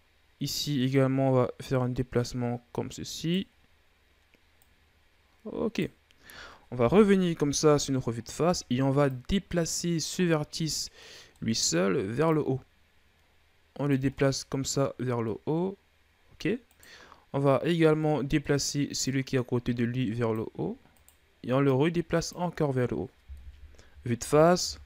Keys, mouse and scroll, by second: 0.5 right click, 4.4 right click, 6.6 KP_1, 7.5-8.4 shift+scroll up 15, 8.8-10.2 drag, 10.2-12.1 middle drag, 12.1-14.0 drag, 14.0-16.5 middle drag, 16.5 right click, 17.8-18.9 middle drag, 18.9-20.8 drag, 20.8 right click, 21.5 click, 22.3-23.1 scroll down 3, 23.1 KP_1, 24.5 ctrl+KP_1.